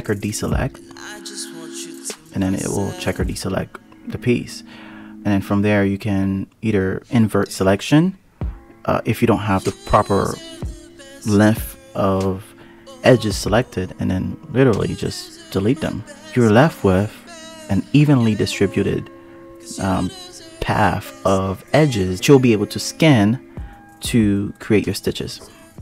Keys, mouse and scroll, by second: 0.3-2.5 scroll down 15, 2.5-3.0 scroll up 3, 3.0-4.1 scroll down 1, 4.1 ctrl+i, 4.9-6.7 scroll up 14, 6.7-8.3 scroll up 1, 9.1 x, 12.3-12.8 scroll up 1, 12.8-13.9 scroll up 2, 13.9 ctrl+i, 15.0 x, 21.2-22.2 scroll down 10, 22.2 scroll down 9, 22.5-22.9 scroll up 1, 23.6 a, 25.3-25.8 drag.